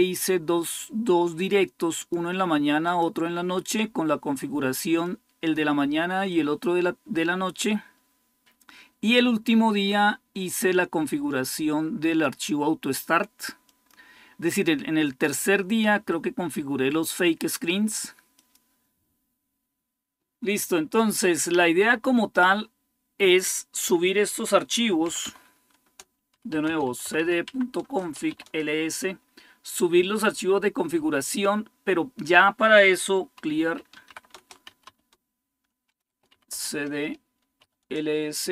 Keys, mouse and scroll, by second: 1.8 click, 2.6 click, 4.8-5.9 drag, 6.1-7.8 drag, 10.3-12.6 drag, 12.7 click, 13.5 click, 18.1 click, 24.9-28.4 typing, 27.6 Return, 32.9-37.9 typing.